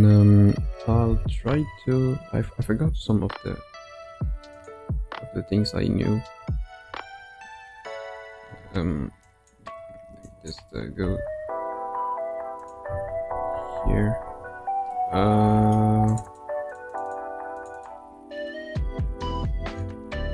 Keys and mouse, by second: 2.4 ctrl+f, 6.3 Tab, 6.8 Tab, 8.4 2, 9.5 click, 9.8 1, 10.2 click, 11.0 g, 13.3 ctrl+r, 14.9 middle click, 16.0 click, 16.2 click, 16.6 click, 16.9 click, 17.1 click, 17.7 click, 20.1 g.